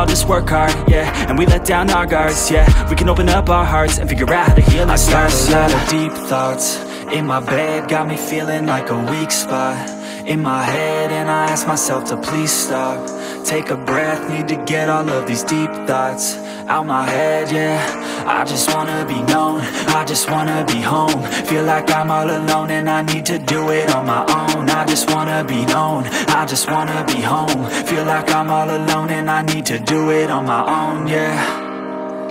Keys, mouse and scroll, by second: 0.9-3.2 middle drag, 3.2 ctrl+z, 3.8-4.7 middle drag, 4.7 g, 5.9-6.4 middle drag, 6.4 scroll up 5, 6.7-7.7 middle drag, 7.7 g, 8.5-10.4 middle drag, 10.4 g, 11.7-13.4 middle drag, 13.4 g, 15.5-17.3 middle drag, 17.4-21.1 drag, 26.0 click, 27.8 click, 29.5-30.7 drag, 30.7 KP_0.